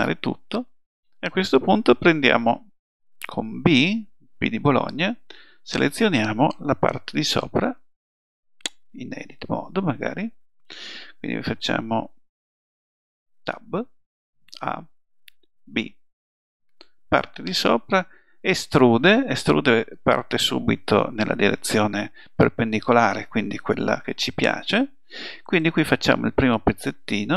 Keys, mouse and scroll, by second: 5.0 b, 11.9 a, 13.4 Tab, 14.4 a, 15.6 b, 18.6 e, 26.0 click.